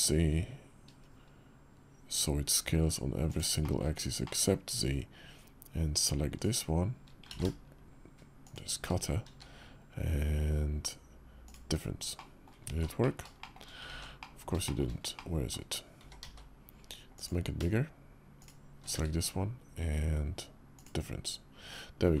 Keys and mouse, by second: 3.4 middle drag, 4.0 middle drag, 4.2 click, 6.1 shift+click, 7.1 ctrl+z, 8.2 shift+click, 9.0 q, 11.9-12.2 drag, 12.4 ctrl+z, 12.8 drag, 13.2 shift+drag, 13.8 ctrl+z, 14.0 click, 14.4 shift+middle click, 14.9-15.3 drag, 15.7 s, 18.1 shift+middle click, 18.7 q.